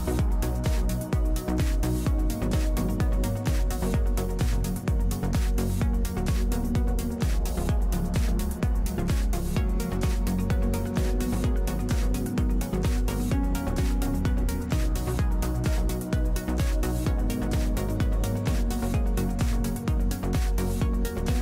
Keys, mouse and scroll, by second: 1.9 Tab, 6.9 a, 7.1 ctrl+r, 7.7 ctrl+r, 7.8 a, 9.4-10.9 middle drag, 13.9 Tab, 15.3-18.1 middle drag, 16.2 Tab.